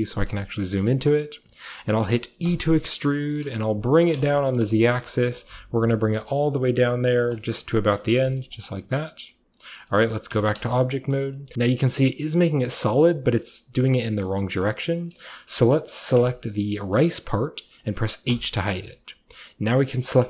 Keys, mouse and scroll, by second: 0.3 shift+middle click, 0.8 shift+middle click, 1.8-3.4 middle drag, 2.5 e, 3.4 z, 4.0-8.0 shift+drag, 5.1 g, 5.4 z, 8.1 g, 8.3 z, 8.5 click, 8.7-9.6 scroll down 1, 9.6 scroll down 1, 10.3 Tab, 10.6 shift+scroll down 1, 10.8-11.8 shift+scroll up 1, 10.8 shift+middle click, 11.1 shift+middle drag, 11.5-14.0 shift+middle drag, 11.8 shift+scroll down 1, 11.8-12.5 shift+scroll up 1, 12.5-14.0 shift+scroll up 1, 14.3 middle click, 14.4-15.5 scroll up 1, 14.6-16.9 middle drag, 15.5-16.2 scroll up 1, 16.2-16.9 scroll up 1, 18.3 h.